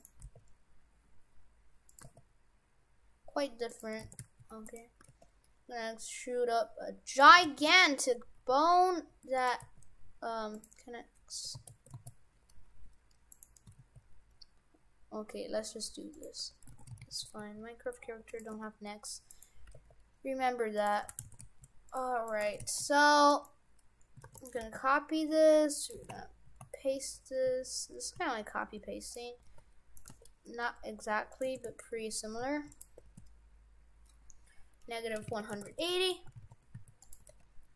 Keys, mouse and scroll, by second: 0.0 right click, 0.2 e, 2.0 e, 4.0 shift+f, 5.0 e, 7.3 shift+f, 9.6 g, 11.6 ctrl+z, 12.0 ctrl+z, 12.5 g, 13.6 e, 16.4 Tab, 16.8 shift+f, 18.5 Tab, 19.3 right click, 19.7 g, 21.0 f, 22.3 right click, 22.5 shift+f, 23.3 right click, 24.3 shift+d, 24.6 g, 26.0 shift+f, 29.4 g, 30.1 g, 31.5 shift+f, 33.0 r, 35.8 shift+f, 37.2 g.